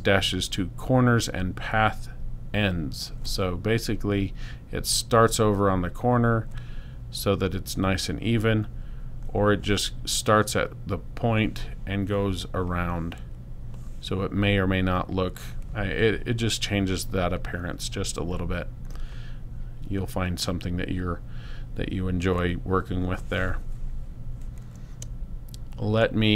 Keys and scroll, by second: 25.0 space.